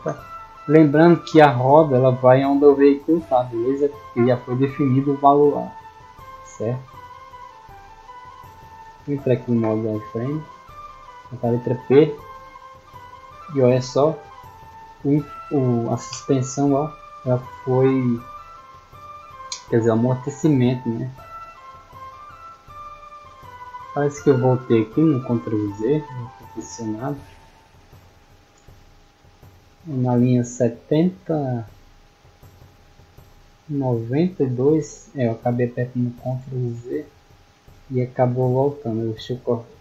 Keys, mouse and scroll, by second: 0.2 right click, 0.6 scroll down 1, 1.0-1.6 middle drag, 3.1 click, 5.9 middle click, 6.4 shift+middle drag, 7.4-8.5 drag, 10.6 middle click, 11.1 middle click, 23.9-26.7 middle drag, 27.7 click, 33.0 middle click.